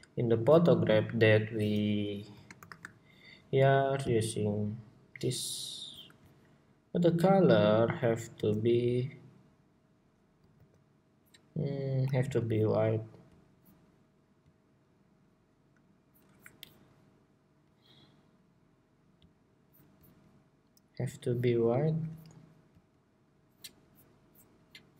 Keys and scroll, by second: 2.3 shift+super+y, 8.1 ctrl+c, 10.8 alt+c.